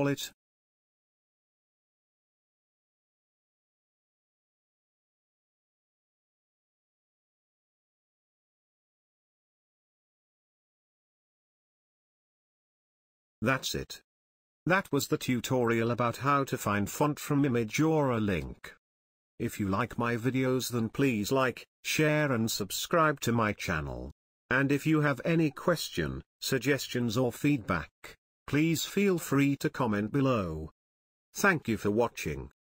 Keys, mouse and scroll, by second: 2.8 click, 7.9 click, 17.2 click, 18.4 scroll down 1, 20.8 scroll down 1, 23.4 click.